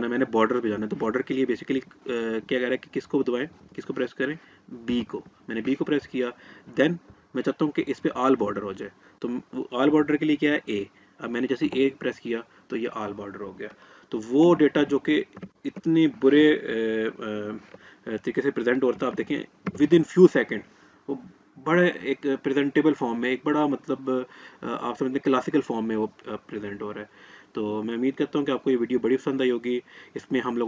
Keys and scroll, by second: 3.2 b, 10.8 a.